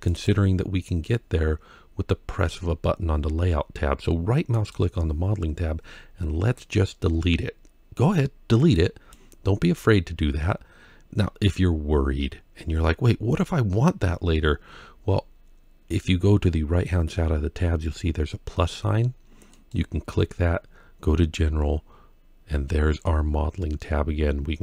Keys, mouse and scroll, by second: 0.8-1.2 scroll up 3, 4.3-8.9 right drag, 14.2-17.2 scroll down 6, 19.3 click.